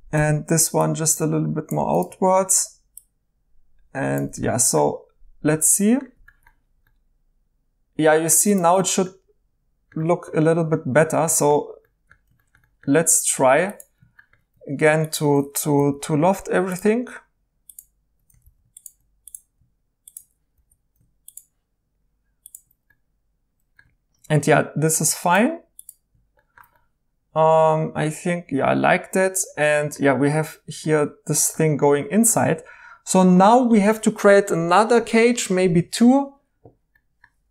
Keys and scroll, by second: 0.2 g, 8.7 2, 15.7 i, 18.4 ctrl+z.